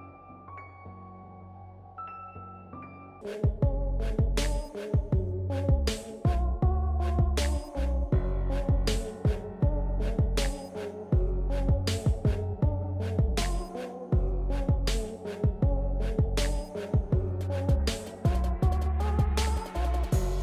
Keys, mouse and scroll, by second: 0.5 click, 4.6 ctrl+scroll up 1, 6.0-11.1 drag, 11.1 space, 11.4 click, 11.7 space, 11.9 click, 12.1 space, 12.7-20.4 drag.